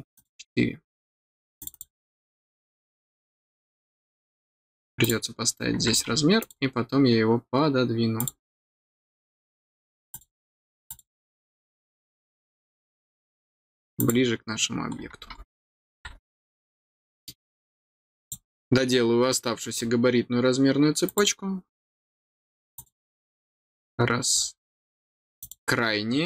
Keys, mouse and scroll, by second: 0.1 click, 0.7-1.1 scroll down 2, 1.5 click, 1.7 click, 5.0 click, 6.3 click, 8.1 click, 10.1 click, 10.8 click, 13.9 click, 14.9 middle click, 14.9-15.4 scroll down 2, 16.4 middle click, 18.2 click, 19.7-20.1 scroll down 1, 21.0 click, 22.7 click, 25.4 click.